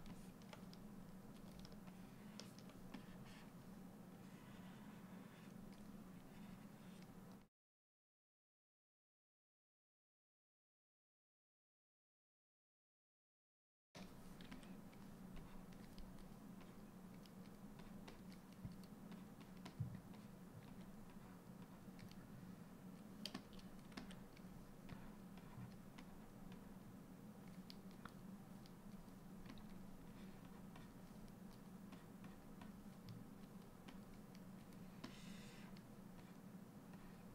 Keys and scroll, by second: 13.9 s, 20.2 s, 23.5 s, 29.0 s, 37.2 s.